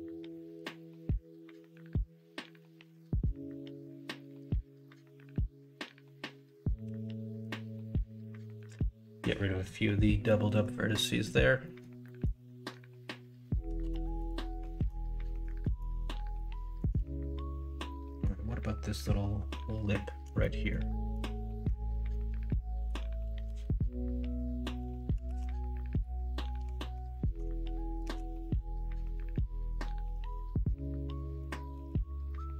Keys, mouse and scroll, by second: 0.4 middle click, 1.5 middle click, 2.5 k, 3.4 k, 4.2 l, 6.8 m, 10.2 middle click, 10.9 middle click, 11.6 middle click, 12.0 middle click, 13.8 KP_1, 14.0 KP_3, 14.7 alt+z, 15.4 alt+z, 16.3 shift+middle click, 20.4 middle click, 21.1 shift+middle click, 22.1 middle click, 23.4 KP_3, 25.2 ctrl+r, 26.6 2, 28.0 g, 31.7 ctrl+b.